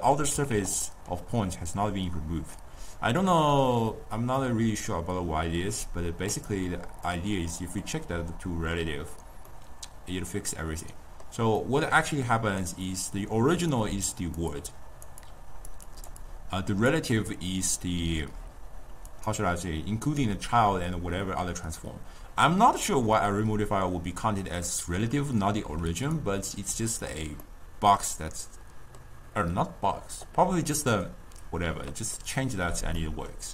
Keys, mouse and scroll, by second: 0.0-0.4 middle drag, 0.4 alt+z, 1.0-4.0 middle drag, 4.0-4.5 scroll up 1, 4.5-6.5 drag, 7.1-13.6 middle drag, 13.6-17.9 typing, 13.8 click, 14.6 click, 14.9 click, 15.3 click, 15.6 click, 16.0 click, 16.3 click, 19.2 click, 25.9 d, 26.3-27.5 right drag, 27.5-30.6 middle drag, 32.3-33.5 middle drag.